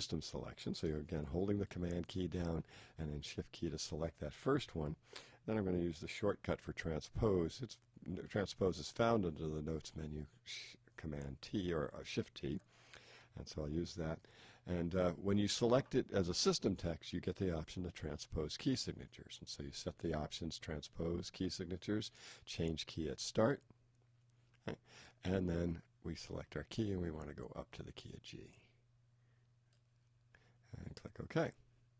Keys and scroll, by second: 13.2 shift+t.